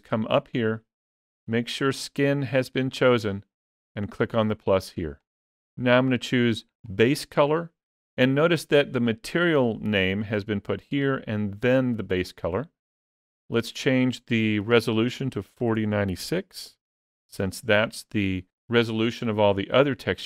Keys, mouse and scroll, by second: 0.1 click.